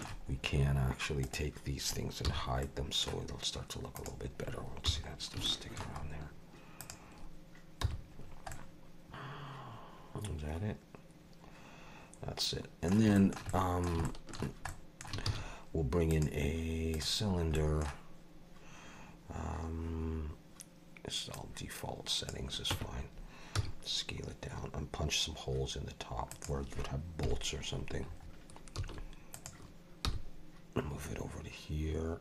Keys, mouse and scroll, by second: 0.3 scroll up 2, 1.2 click, 2.3 h, 2.6 middle click, 4.0 click, 4.9 h, 5.1 scroll down 3, 5.5 shift+middle click, 6.0-6.8 scroll up 3, 6.8 click, 7.8 h, 8.2-8.5 scroll down 3, 8.5 middle click, 13.2 shift+middle click, 13.5 middle click, 14.0 shift+middle click, 14.7 middle click, 15.3 shift+a, 17.2-17.5 scroll down 3, 17.5 middle click, 21.3 click, 22.7 Tab, 23.5 s, 27.2 KP_7, 28.0-28.8 scroll up 4, 28.8 s, 30.0 g.